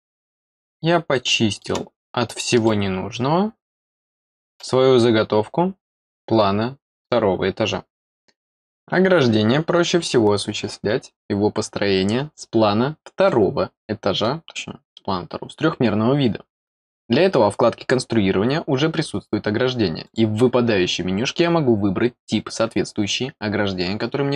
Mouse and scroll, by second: 0.4-1.6 middle drag, 2.0-2.4 scroll down 2, 2.6-4.5 middle drag, 13.2 middle click, 20.0 click.